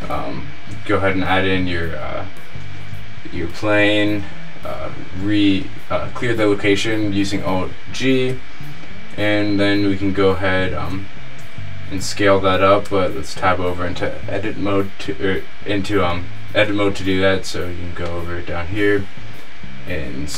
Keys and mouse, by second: 4.3 alt+g, 12.9 Tab, 18.3-18.9 drag, 19.0-19.5 drag, 20.1 middle click.